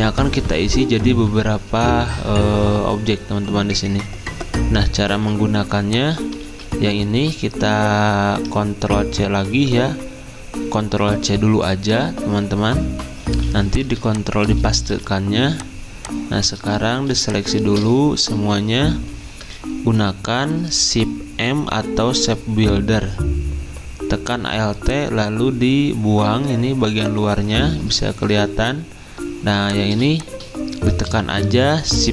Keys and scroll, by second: 6.4 ctrl+z, 9.4 ctrl+c, 13.2 z, 14.8 v, 20.0-20.8 typing, 31.9 m.